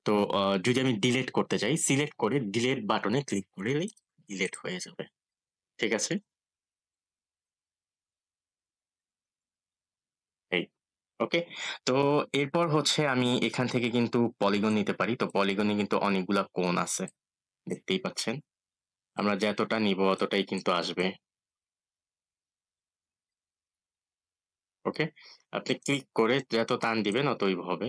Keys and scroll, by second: 1.2 Delete.